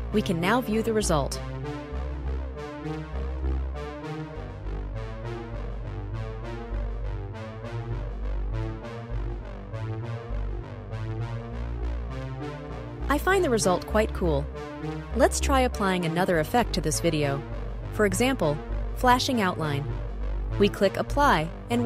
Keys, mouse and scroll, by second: 2.0-4.5 drag, 7.1 click, 8.1-9.2 drag, 19.6-21.4 drag.